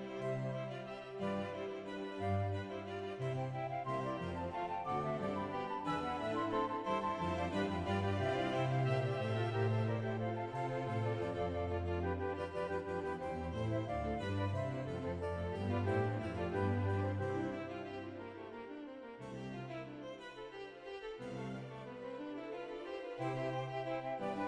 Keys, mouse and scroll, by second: 0.5 ctrl+s, 0.5-1.2 scroll up 1, 0.5 shift+n, 0.5 a, 1.2 scroll down 1, 1.5 shift+right click, 2.8-3.2 scroll down 2, 3.2 middle click, 3.7-4.2 shift+scroll up 1, 4.2 middle click, 4.2 KP_1, 5.5 shift+middle click, 5.5-5.8 scroll down 2, 6.3 shift+middle click, 6.7 click, 6.7 g, 7.2 right click, 7.2-7.5 scroll up 1, 7.7 click, 8.0 middle click, 9.0 ctrl+z, 9.0 g, 9.2 click, 10.1 shift+click, 11.9 ctrl+r, 11.9 right click, 12.1 scroll up 1, 12.3 shift+middle click, 12.6 click, 12.6 s, 12.8 g, 14.3 a, 15.0-16.4 middle drag, 16.4-18.4 drag, 16.4 g, 16.4 x, 18.4-19.0 scroll up 9, 18.4 y, 20.1 shift+middle click, 20.1-20.5 scroll down 1, 20.5-20.9 scroll up 2, 20.9 right click, 20.9 click, 20.9 d, 20.9 g, 20.9 right click, 22.2 click, 22.2 g, 22.2 right click, 22.4 click, 22.5 shift+middle click, 22.6 g, 22.8 right click, 23.0 click, 23.1 shift+middle click, 23.2 g, 23.5 click, 23.5 right click, 23.8 right click, 24.1 right click, 24.1 scroll up 1, 24.2 g, 24.3 Tab, 24.3 scroll down 3.